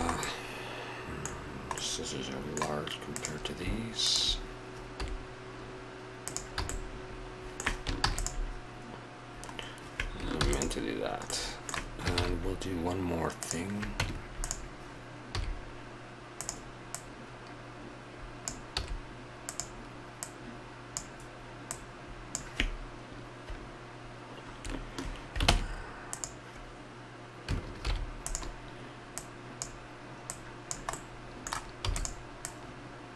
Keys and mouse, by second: 0.2 middle click, 2.0 middle click, 5.0 s, 6.6 a, 8.0 ctrl+a, 10.4 ctrl+s, 12.2 shift+a, 14.0 Tab, 15.2 s, 18.7 s, 25.5 ctrl+Tab, 27.8 alt+m, 29.1-30.9 drag, 30.9 middle click, 31.3 click, 31.8 e.